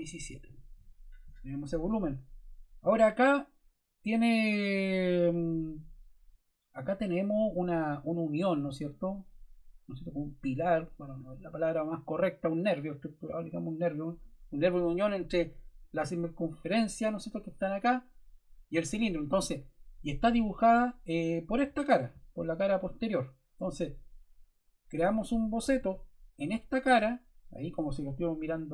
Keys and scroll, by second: 0.4 7, 0.6 Return.